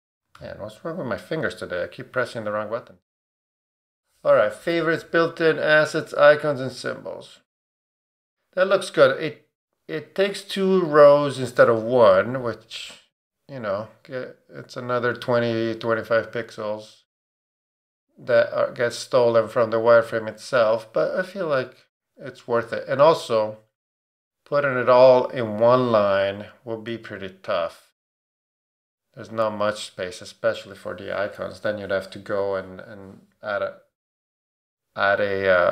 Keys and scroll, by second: 0.3 super+0.